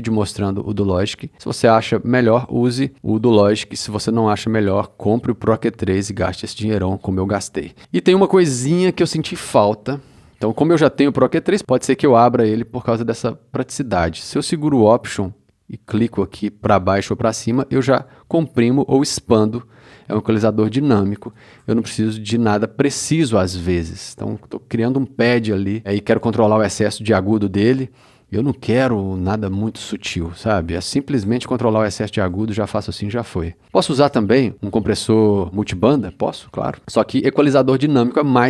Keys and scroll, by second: 35.5 c.